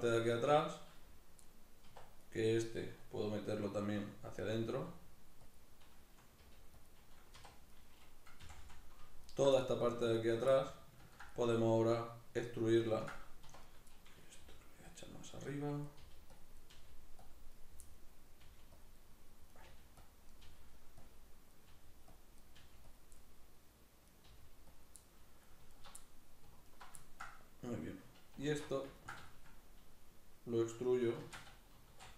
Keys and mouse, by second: 1.7 1, 2.0 right click, 2.4-4.4 middle drag, 3.7 e, 4.4 click, 4.5 e, 5.3 click, 6.2 g, 6.7 click, 7.1 2, 7.5 right click, 8.2 f, 9.0 alt+right click, 9.3 middle click, 9.9 alt+right click, 10.3-13.4 middle drag, 13.2 1, 13.4 right click, 13.7-14.7 middle drag, 14.2 g, 14.7 click, 15.1 right click, 15.6 right click, 15.8 g, 16.2 click, 16.3 right click, 16.4 g, 17.0 click, 17.3 right click, 17.6-18.6 middle drag, 18.2 g, 18.6 click, 18.7 middle click, 19.2 right click, 19.4 g, 19.8 click, 20.0 right click, 20.2 g, 20.8 click, 21.2 right click, 21.4 g, 21.9 click, 22.2 right click, 22.3 g, 22.7 click, 22.9 middle click, 23.8 right click, 24.0 g, 24.5 click, 24.8 middle click, 25.5 alt+right click, 25.8 middle click, 26.4 alt+right click, 26.8-32.1 ctrl+middle drag, 28.3 alt+q, 31.0 shift+Tab, 31.5 e.